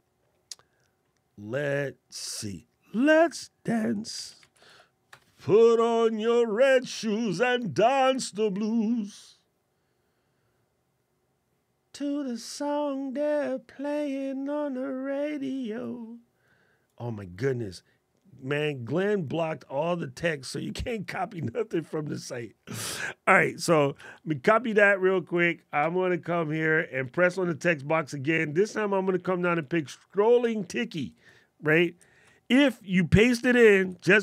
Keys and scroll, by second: 23.7 super+c, 33.7 super+v.